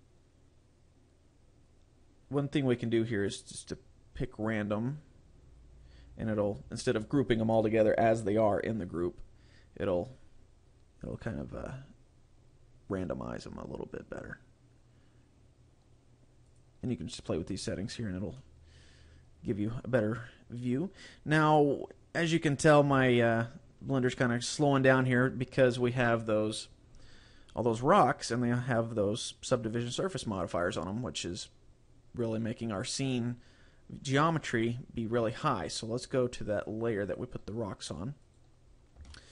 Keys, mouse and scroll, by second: 5.3 click, 6.2 click, 13.3 click, 14.3 click, 18.5 click, 19.5 middle click, 22.2 scroll down 1, 24.2 shift+middle click, 37.5 click, 38.3 right click, 38.7-39.1 scroll up 6, 39.1 shift+middle click.